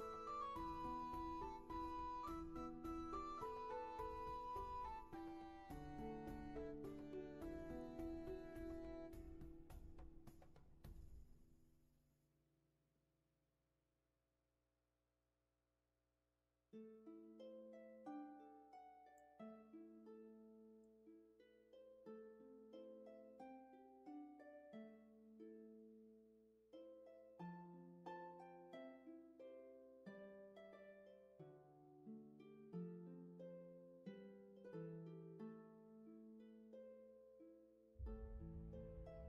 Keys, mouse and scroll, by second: 2.0 space, 2.5 scroll down 1, 9.7 ctrl+z, 14.0 ctrl+z, 26.1 ctrl+z, 30.0-31.1 scroll down 1, 31.1-32.0 scroll up 1, 34.5 ctrl+z.